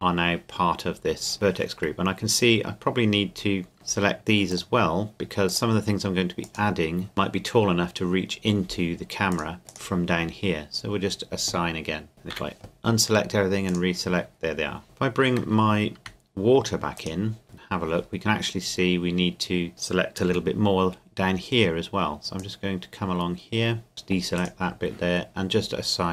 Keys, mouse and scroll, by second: 3.7 click, 9.3 click, 9.7 right click, 12.1 click, 12.3 a, 13.7 click, 15.4 Tab, 17.0 shift+click, 17.4 Tab, 20.3 c, 21.0-22.4 scroll up 1, 22.4 click, 23.9 middle click, 24.4-26.1 right drag.